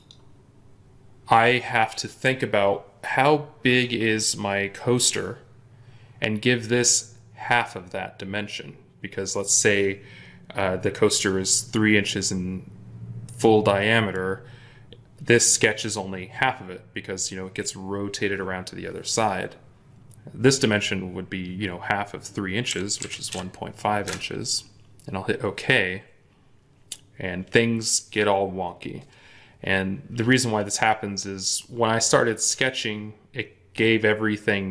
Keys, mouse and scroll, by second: 22.6-23.2 typing, 23.9 Return.